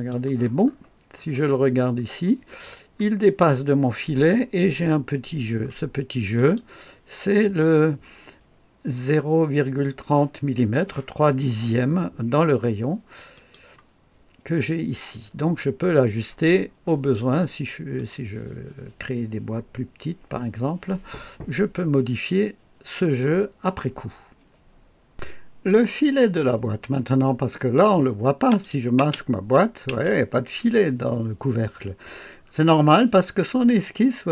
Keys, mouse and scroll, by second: 0.5-1.7 scroll up 3, 1.7-2.6 scroll up 1, 2.6-6.3 scroll down 2, 6.3 click, 6.7 click, 13.2 click, 15.8-17.3 scroll down 3, 17.3-18.3 right drag, 25.0 click, 28.5 click, 29.0 space, 29.9 space, 32.4-33.6 scroll up 1.